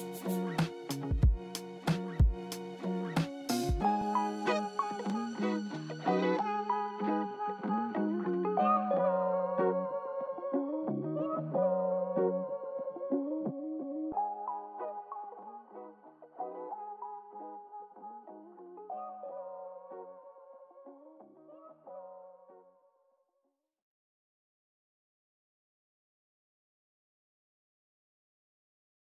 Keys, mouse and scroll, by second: 1.1 scroll down 2, 3.2-4.3 scroll down 1.